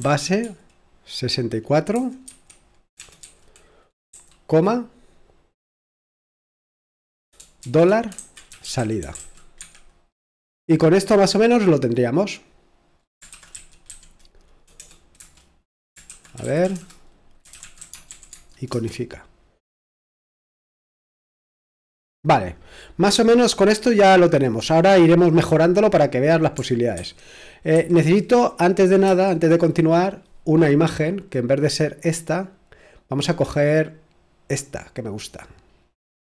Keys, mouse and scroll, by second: 0.0-0.4 typing, 2.2-3.2 typing, 7.6-9.7 typing, 13.1-14.8 typing, 15.2 Return, 16.1-18.8 typing, 26.9 super+2, 27.7 super+1, 29.0 super+8, 31.3 click, 32.2-32.7 scroll down 1, 33.5-34.1 scroll down 1, 35.1-36.2 drag.